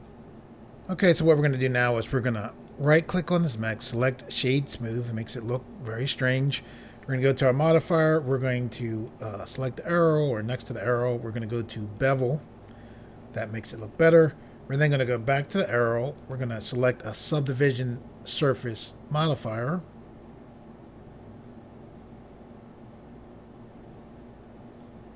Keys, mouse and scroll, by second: 2.6 right click, 3.5 click, 9.0 click, 11.9 click, 16.1 click, 19.3 click.